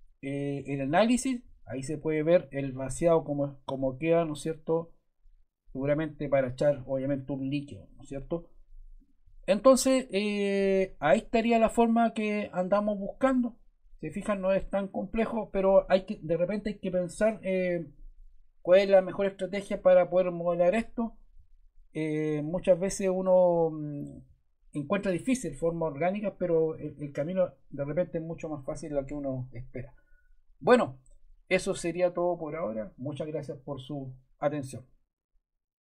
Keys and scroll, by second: 22.8 Delete.